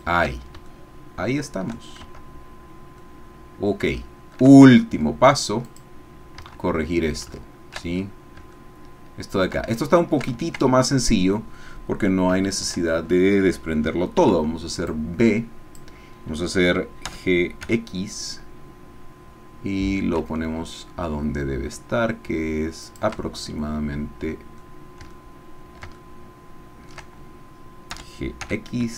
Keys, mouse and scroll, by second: 0.8-1.8 shift+drag, 2.1 shift+Tab, 2.7-3.0 scroll down 1, 3.0-4.0 drag, 4.1 shift+click, 4.6 shift+click, 5.8 click, 6.4 Tab, 7.9-8.4 shift+scroll up 1, 8.6 shift+middle click, 10.0 shift+middle click, 10.7-11.0 ctrl+scroll up 1, 12.3 a, 14.2 b, 14.9-15.9 drag, 17.0 g, 22.8 shift+click, 23.3-24.7 shift+drag, 25.2 ctrl+click, 26.0 ctrl+shift+click, 26.9 shift+middle click, 27.9 g, 28.4 x.